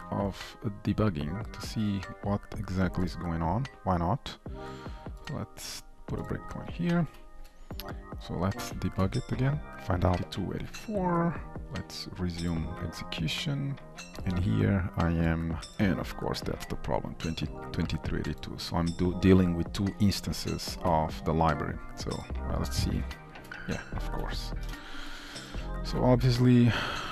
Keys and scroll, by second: 7.0 ctrl+F8, 8.5 shift+F9, 11.0 F8, 12.1 F9, 15.6 F8, 20.2 ctrl+F2, 22.6 ctrl+b, 24.3 shift+Return, 26.1 Return.